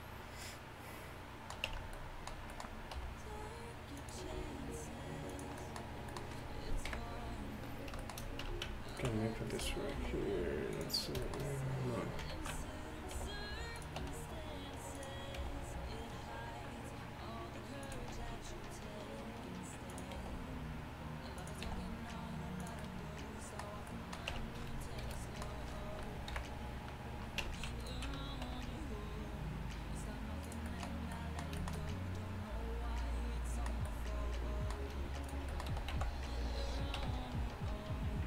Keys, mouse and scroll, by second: 1.7 Tab, 3.0 r, 4.3 g, 6.9 KP_1, 8.5 Tab, 10.0 g, 12.4 ctrl+z, 13.5 g, 15.0 r, 15.4 g, 18.2 r, 20.2 g, 21.7 e, 24.4 Tab, 25.1 shift+h, 26.4 KP_1, 27.5 Tab, 28.5 r, 35.3-38.2 right drag, 35.8 s.